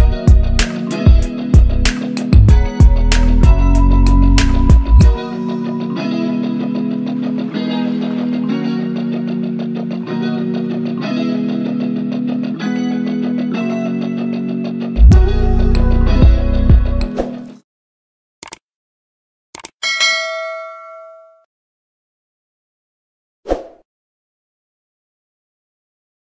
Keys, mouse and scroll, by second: 1.3 scroll up 1, 1.6-2.4 click, 2.4 right click, 2.4-5.0 drag, 5.0-5.4 click, 7.2 shift+click, 7.9-8.5 click, 8.3-9.6 right drag, 10.4 click.